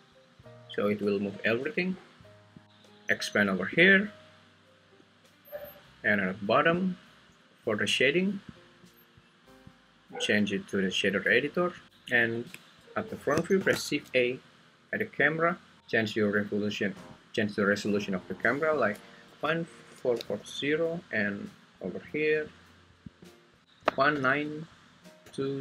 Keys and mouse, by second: 1.5 Escape, 3.8-5.0 drag, 6.7-8.6 drag, 9.9-11.3 drag, 13.6 shift+a, 17.1 click, 18.8-25.6 drag.